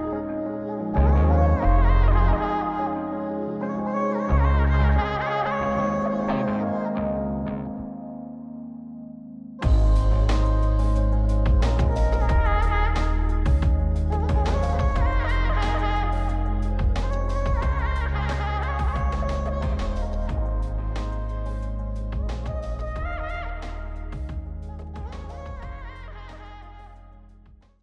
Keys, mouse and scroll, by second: 0.8 scroll up 2, 2.1 click, 4.2 click, 5.2-6.7 drag, 9.5-11.1 drag, 11.3-12.5 drag, 13.0-15.2 drag, 15.6-16.5 scroll down 1, 16.5 middle click, 16.5 scroll down 1, 17.1 click, 17.8 m, 18.8 m, 19.9 m, 20.9 m, 22.1-23.3 drag, 24.0 m, 25.0 m, 26.0 m, 26.9 m.